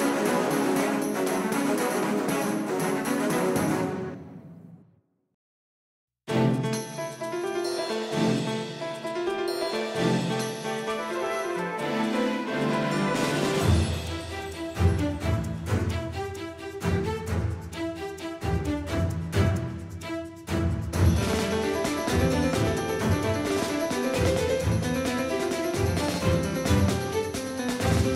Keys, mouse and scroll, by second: 3.6 s, 12.5-17.4 right drag, 15.4-17.5 drag, 21.7 ctrl+z, 26.7 ctrl+z, 27.4 ctrl+z.